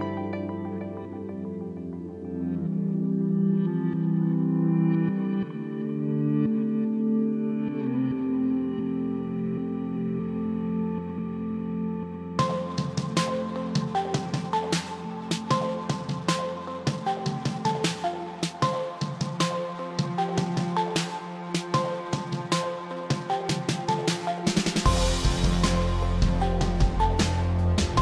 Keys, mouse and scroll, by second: 0.2 click, 0.5 middle click, 0.7 middle click, 2.0 click, 4.3 click, 4.4 click, 5.7 click, 7.2-7.8 scroll, 8.6-9.0 scroll, 10.1 click, 10.9-11.9 scroll, 12.4 click, 14.8 ctrl+j, 16.2 click, 19.6 click, 24.2 click, 25.7 click, 27.8 click.